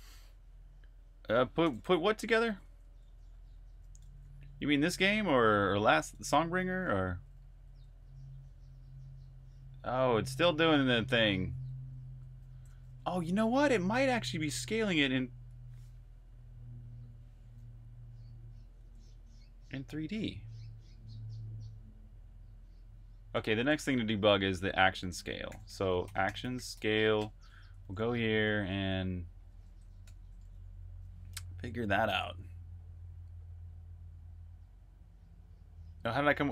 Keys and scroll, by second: 1.8-12.5 typing, 12.6 super+q, 18.4 Escape, 18.6 j, 25.1-28.4 typing, 29.9 super+\, 30.3-32.4 typing, 33.9 Return.